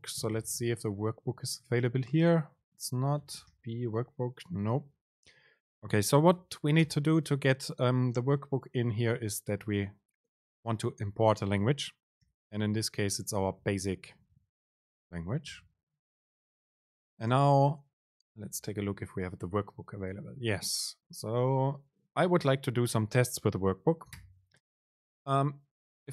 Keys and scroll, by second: 7.1 super+l, 17.5 super+space.